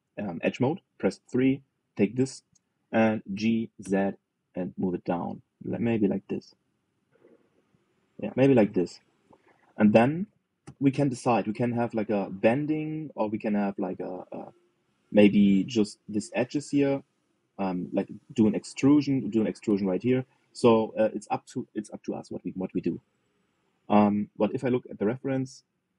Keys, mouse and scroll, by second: 1.3 KP_3, 2.3 click, 4.0 g, 10.1-11.3 middle drag, 11.3 KP_3, 18.3-20.8 scroll up 1, 24.1 middle click, 24.6 alt+z.